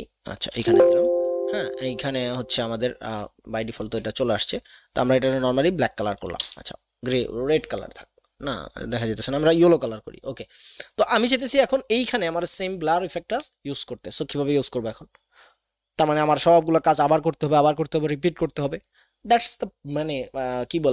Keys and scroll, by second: 2.4 x, 6.5 v.